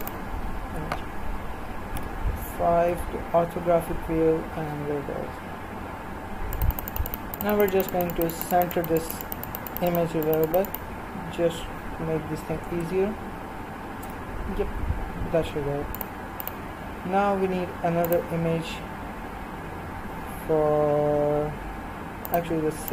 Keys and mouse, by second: 0.0-1.9 drag, 1.9 KP_5, 2.9 KP_1, 4.1 middle click, 5.5 middle click, 6.6 click, 7.5 middle click, 8.0-12.8 drag, 15.5 middle click, 16.0-20.8 drag, 22.8 click.